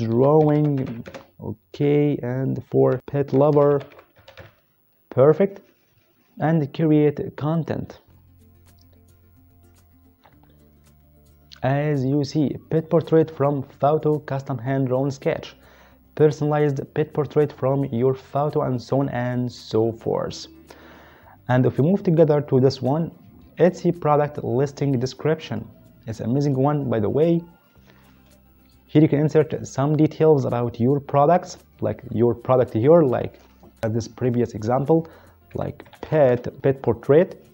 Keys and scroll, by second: 0.0-1.8 typing, 2.9-4.4 typing, 35.5-36.6 typing.